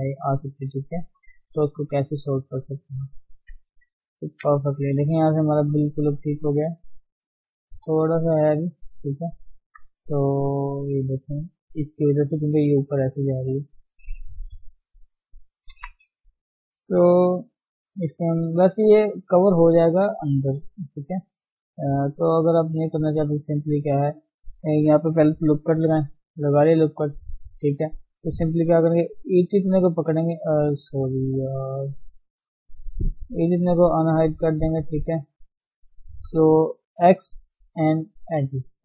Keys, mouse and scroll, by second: 0.7 click, 1.0 g, 2.4 click, 3.7 Tab, 4.2 ctrl+1, 4.9 scroll down 2, 5.1-7.2 middle drag, 7.2 scroll up 1, 7.5-8.8 middle drag, 8.8 Tab, 9.1 middle click, 9.4 scroll up 1, 9.7-13.4 shift+middle drag, 13.4 Tab, 15.6 ctrl+0, 17.1 ctrl+KP_1, 18.0 Tab, 18.2-18.6 scroll up 1, 18.6 shift+middle click, 18.8-19.1 scroll down 2, 19.1-25.6 shift+middle drag, 25.6 ctrl+r, 27.9 shift+middle click, 28.2-30.1 shift+scroll up 2, 28.3 shift+z, 30.1 ctrl+click, 30.2 shift+z, 31.7 ctrl+z, 32.5-33.1 scroll down 4, 33.1 shift+z, 34.8 ctrl+click, 35.0 scroll up 1, 35.3 shift+z, 38.3 x, 38.6-38.8 scroll up 2.